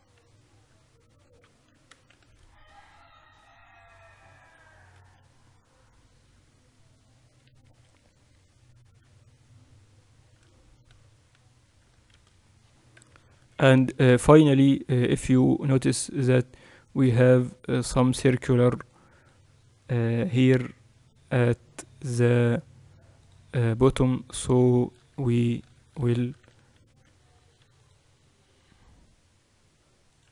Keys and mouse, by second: 1.1 Tab, 3.1 shift+z, 5.9 KP_8, 6.5 KP_8, 8.2 KP_6, 8.3 KP_6, 8.5 KP_6, 11.6 z, 12.8 a, 13.7 KP_1, 14.5 z, 24.7-29.3 middle drag, 25.9 Tab, 26.2 z, 27.6 ctrl+r.